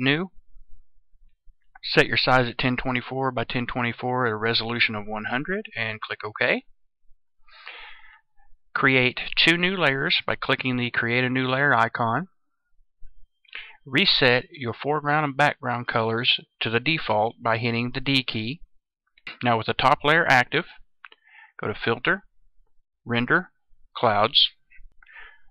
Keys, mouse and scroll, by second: 17.8 d, 19.1 click.